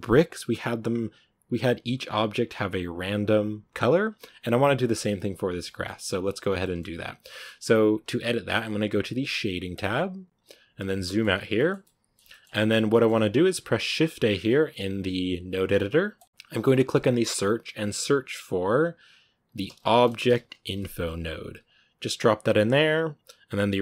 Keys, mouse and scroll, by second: 5.7 shift+middle click, 6.1 scroll up 2, 6.5-9.6 shift+middle drag, 9.6 click, 10.2-11.4 scroll down 4, 11.4-12.5 shift+middle drag, 12.5 scroll down 3.